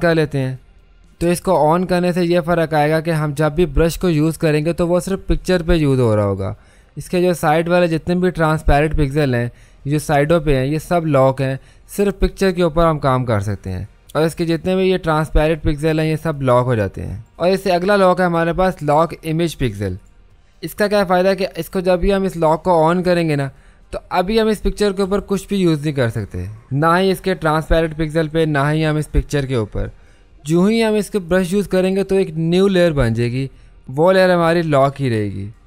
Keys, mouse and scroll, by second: 3.9 click, 3.9 typing, 8.5 typing, 11.4-14.0 drag, 11.4 typing, 16.3 click, 20.0 click, 25.0 b, 31.3 click.